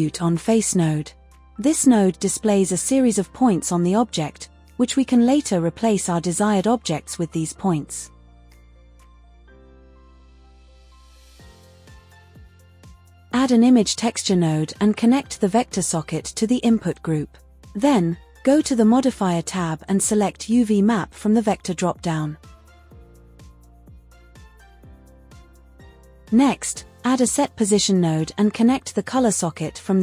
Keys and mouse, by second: 4.7-6.8 drag, 9.0-10.9 drag, 11.4 shift+a, 18.4-20.8 drag, 21.1-21.9 drag, 22.6-22.9 drag, 25.4 click, 26.4 shift+a, 29.0-30.0 drag.